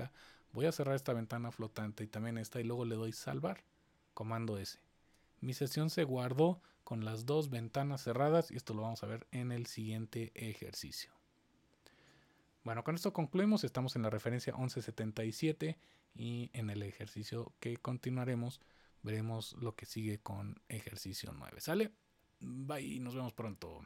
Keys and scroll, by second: 2.9 super+s.